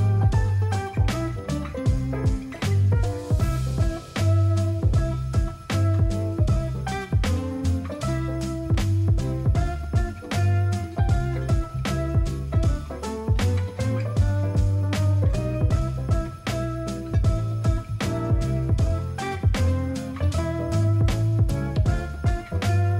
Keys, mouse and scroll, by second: 2.9 ctrl+a, 7.7 ctrl+z, 10.4 ctrl+0, 13.1 ctrl+t, 16.1 ctrl+d, 16.7 ctrl+t, 18.9 alt+click, 20.5 ctrl+j, 21.7 ctrl+t.